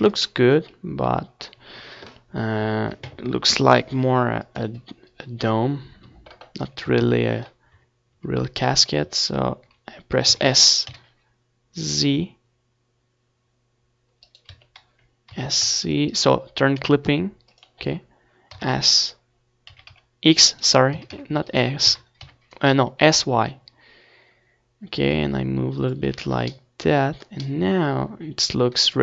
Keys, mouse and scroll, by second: 0.8 Tab, 2.1 s, 6.5-8.1 right drag, 6.6 Tab, 7.4 s, 8.2-9.4 right drag, 9.4 middle click, 9.9 z, 10.0-11.5 drag, 10.6 s, 10.6 z, 11.9 s, 12.8-17.8 right drag, 13.2 s, 14.3 s, 18.7-20.8 drag, 18.9 z, 20.8-22.2 middle drag, 23.7 Tab, 24.6 ctrl+s, 25.5 Tab, 26.9 z, 27.6 a, 28.8-29.0 drag.